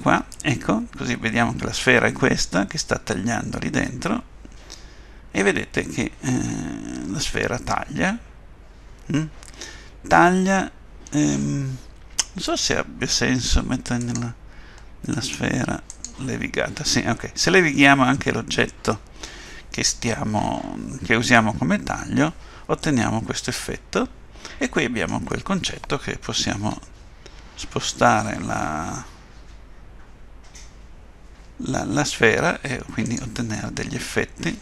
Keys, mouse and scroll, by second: 3.9 middle click, 14.0 click, 15.1 right click, 16.9 middle click, 26.6 g, 33.4 middle click.